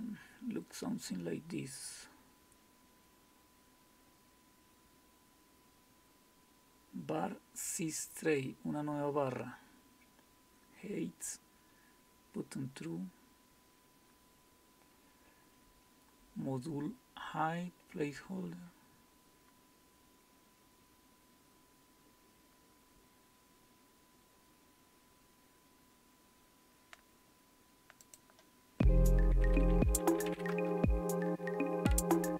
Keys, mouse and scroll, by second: 8.0-14.2 scroll down 1, 14.2-22.6 scroll down 1, 22.6-24.0 scroll down 1, 24.0-28.0 scroll down 1, 28.0 click.